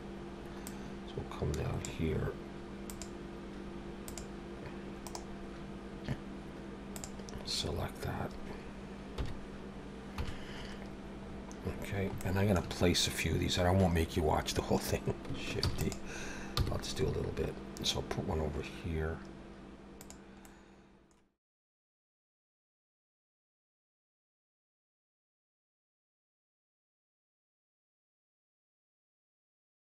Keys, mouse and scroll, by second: 0.6 click, 2.9 click, 4.0 click, 5.1 right click, 7.7-8.0 scroll up 2, 9.1 KP_1, 10.2 KP_7, 11.2-12.1 scroll down 5, 12.2 shift+middle click, 15.6 shift+d, 16.6 g, 20.4 middle click, 21.4 middle click, 21.8 KP_3, 22.2 scroll up 2, 22.8 g, 23.1 scroll up 5, 23.4 shift+middle click, 23.7 middle click, 23.9 scroll down 3, 24.1 shift+middle click, 24.4 Tab, 24.5 a, 24.7 middle click, 25.1 click, 25.5 middle click, 25.8 KP_3, 26.0-26.5 scroll up 4, 26.7 r, 27.6 r, 28.5 click, 29.0 middle click, 29.2 scroll down 2, 29.4 shift+middle click, 29.5 middle click, 29.8 click.